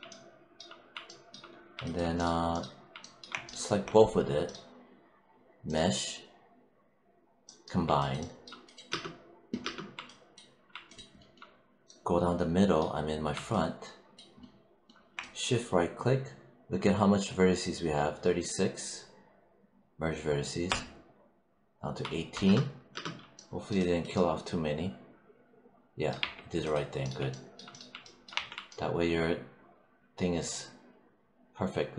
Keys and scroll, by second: 8.7 space, 22.3 space, 26.0 3, 28.2 1.